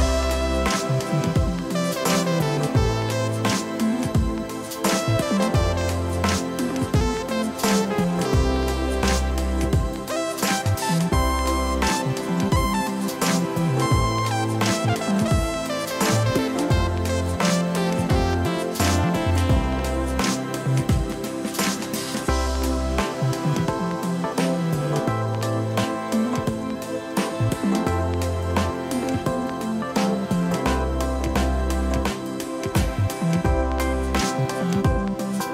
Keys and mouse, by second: 0.4 right click, 1.5 click, 6.2 click, 11.7 click, 16.0 alt+y, 16.3 click, 18.5 click, 25.0 right click, 25.4 click, 34.2 shift+click, 35.0 Escape, 35.4 click.